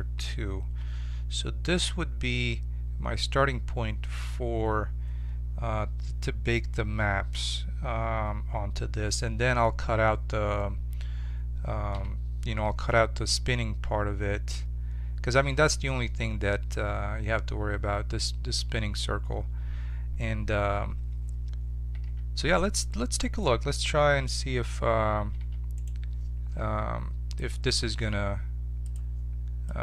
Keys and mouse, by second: 0.9 Tab, 11.9 1, 22.0 1, 25.3 2, 25.7-27.4 drag, 27.7-29.3 drag.